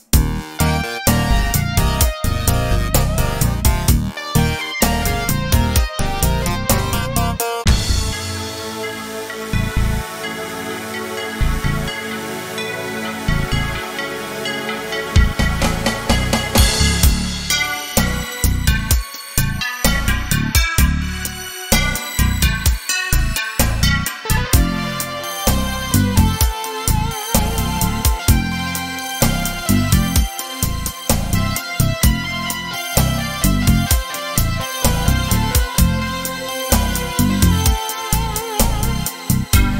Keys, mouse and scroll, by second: 8.5-21.9 middle drag, 21.9 click, 23.7 g, 23.8 g, 27.7 click, 30.1-39.7 shift+drag, 38.1-38.7 scroll up 2, 38.7-39.6 scroll up 1.